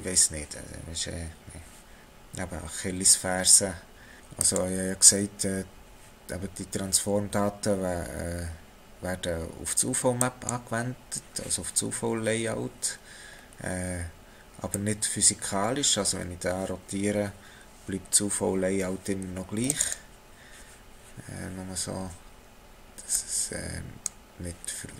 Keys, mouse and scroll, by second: 4.2 click, 4.4 click, 13.3 scroll down 2, 14.8 click, 23.1 click.